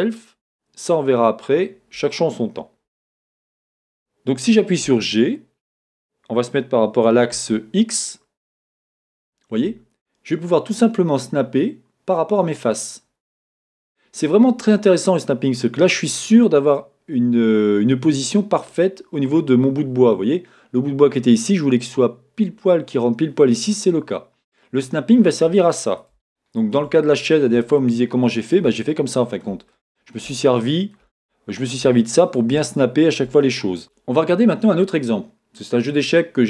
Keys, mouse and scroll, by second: 4.9 g, 16.7-18.5 middle drag, 18.5-19.2 scroll down 2, 19.2-33.8 middle drag, 19.2-23.5 scroll up 3, 24.4-24.8 scroll down 1, 24.8-26.2 scroll up 1, 27.1-27.6 scroll down 1, 27.6-28.9 scroll down 1, 33.9-36.4 shift+middle drag, 35.5-36.4 scroll down 1.